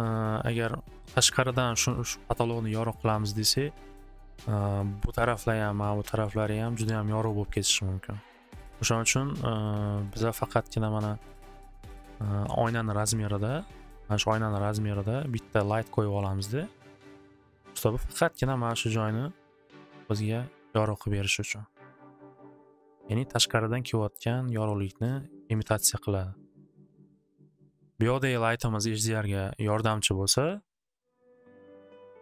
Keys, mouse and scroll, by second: 5.7 click, 6.8 click, 7.9 click, 12.2 click, 15.2 click, 20.0 click, 23.0 click, 24.5 click, 25.0 click, 25.5 click, 26.6 click, 30.3 click.